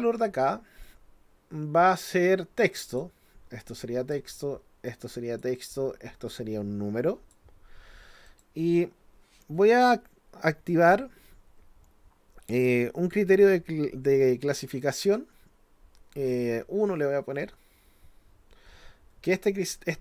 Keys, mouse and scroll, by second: 0.9-3.0 drag, 3.6 click, 4.9 click, 6.3-7.3 drag, 8.3 click.